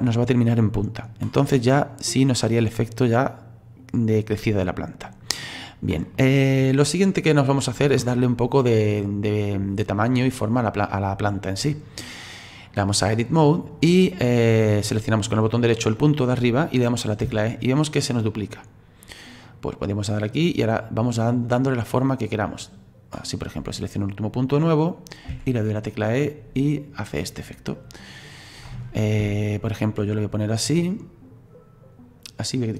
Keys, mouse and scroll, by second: 1.4-5.6 drag, 5.6-8.7 scroll down 5, 9.0-13.8 drag, 13.8-15.7 middle drag, 15.7 right click, 17.2 e, 20.3 right click, 24.3 right click, 25.3 e, 28.4-29.0 scroll down 2, 29.0-29.3 scroll up 2, 29.3 shift+middle click, 30.1 right click.